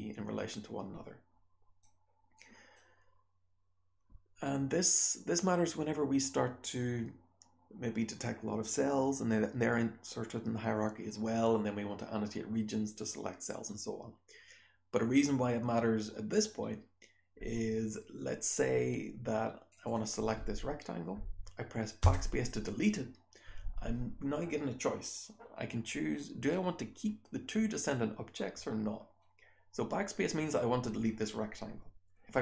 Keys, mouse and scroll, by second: 1.8-2.3 scroll up 1, 2.3 click, 2.3-19.7 scroll up 1, 19.7 click, 19.7-22.0 scroll up 1, 19.8 click, 22.0 BackSpace.